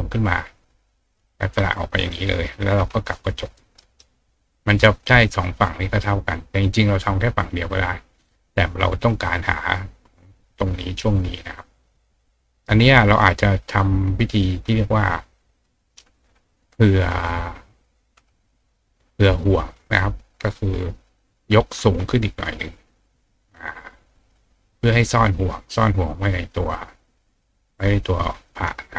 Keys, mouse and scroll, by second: 0.8 ctrl+click, 2.0 click, 3.1 ctrl+click, 3.6 ctrl+right click, 11.8 click, 13.0 click, 15.2 click, 16.0 click, 17.3 click, 18.5 click, 20.6 click, 22.3-24.3 ctrl+drag.